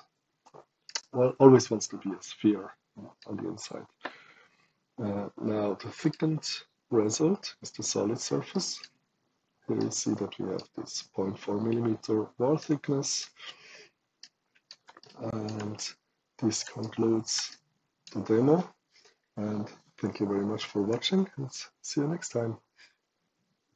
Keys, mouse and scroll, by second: 0.8 right click, 1.4 right click, 1.7 click, 1.8 right click, 2.0 click, 2.2 right click, 2.4 right click, 5.9 click, 7.3 click, 8.5 right click, 9.7 right click, 12.0-12.5 middle drag, 12.5 right click, 13.6 middle click, 13.6 click, 14.2 right click, 14.9 shift+right click, 15.7 shift+right click, 16.7 shift+right click, 17.4 shift+right click, 23.7 click.